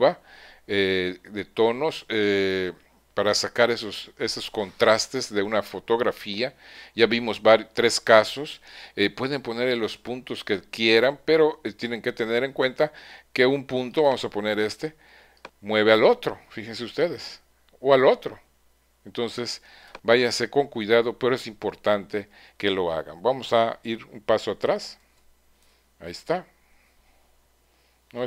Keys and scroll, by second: 25.0 super+z.